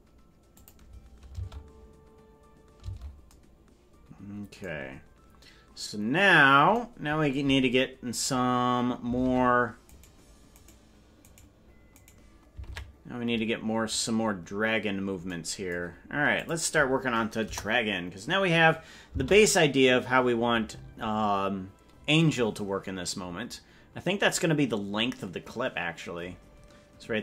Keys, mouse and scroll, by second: 0.5 click, 2.8 space, 9.2 ctrl+Tab, 9.9-11.8 right drag, 12.7 ctrl+Tab, 14.2 right click, 16.4 click, 17.4 KP_0, 19.1 space.